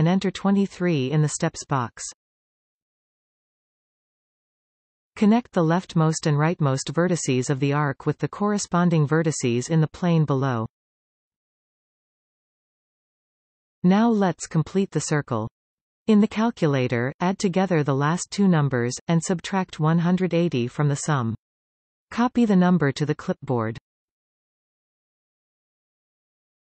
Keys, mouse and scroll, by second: 1.6-4.6 drag, 7.0 shift+click, 7.8 f, 8.7 click, 9.5 shift+click, 10.5 f, 10.6-11.2 scroll up 2, 11.2 shift+middle click, 11.9-12.3 scroll up 3, 12.3-13.7 scroll down 9, 13.7-16.7 shift+middle drag.